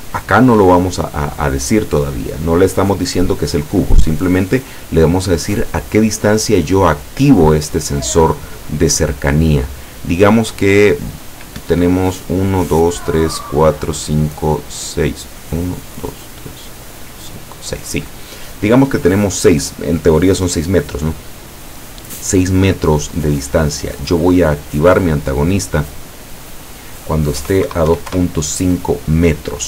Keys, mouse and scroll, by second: 9.7 click, 11.6 Escape, 24.5 click, 27.4 KP_2, 27.7 KP_Decimal, 27.9 KP_5, 28.1 KP_Enter.